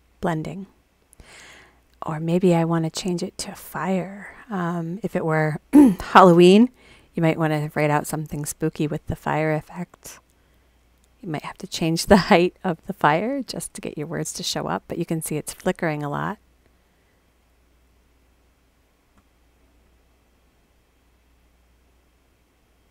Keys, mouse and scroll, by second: 2.2 click, 3.6 click, 5.4 click, 10.9 click, 17.2 click, 18.2 click.